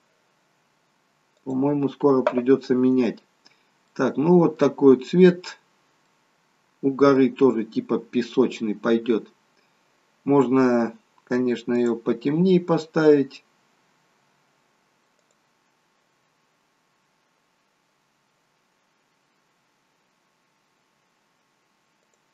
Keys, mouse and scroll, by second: 3.4 scroll up 3, 3.9 middle click, 5.2 scroll down 1, 6.0 middle click, 8.3 scroll down 2, 8.9 scroll up 1, 11.8 click, 18.0 click.